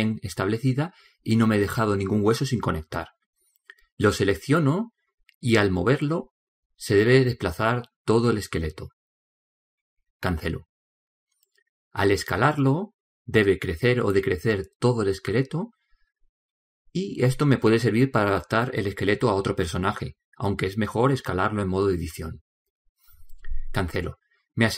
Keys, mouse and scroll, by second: 0.3-5.9 middle drag, 5.9 right click, 7.5 g, 11.7-13.6 middle drag, 13.6 s.